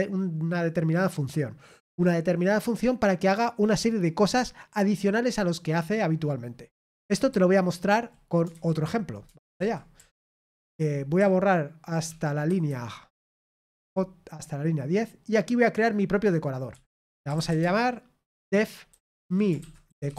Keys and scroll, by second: 9.3 super+l, 9.5 super+l, 9.9-10.8 k, 11.1 j, 19.9-20.1 typing.